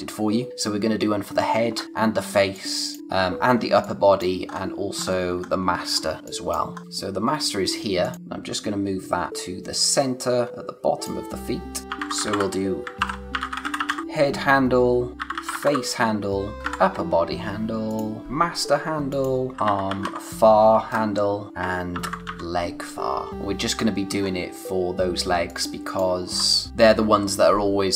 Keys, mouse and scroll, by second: 0.5-1.3 scroll up 1, 1.7-2.3 scroll down 1, 2.3 space, 2.5 click, 2.8 space, 3.8 click, 4.1 space, 4.5-5.0 scroll up 1, 5.0-5.3 scroll down 1, 6.2 space, 6.2 click, 6.6 space, 6.8-7.4 scroll up 1, 8.1 scroll up 1, 8.5 click, 11.8-16.6 typing, 15.1 click, 17.9 click, 18.2 r, 19.1 click, 19.4-20.5 typing, 21.3 click, 21.7-22.8 typing, 23.3 click, 24.2 scroll up 1, 25.3 space, 25.5 click, 25.8 space, 26.2 scroll down 1.